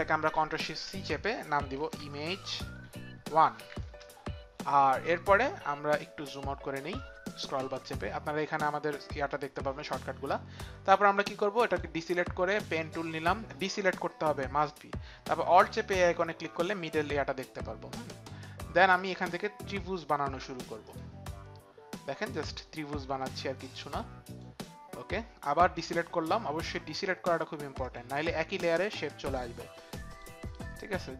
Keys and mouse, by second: 0.6 ctrl+shift+c, 1.6-3.6 typing, 3.8 Return, 11.7 click, 12.8 click.